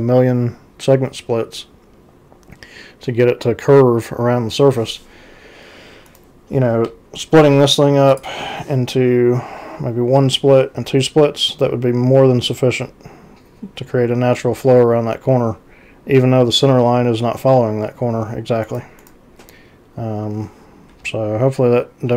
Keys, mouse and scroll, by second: 6.1 ctrl+c, 6.9 z, 8.1 click, 18.6 ctrl+c, 21.0 x.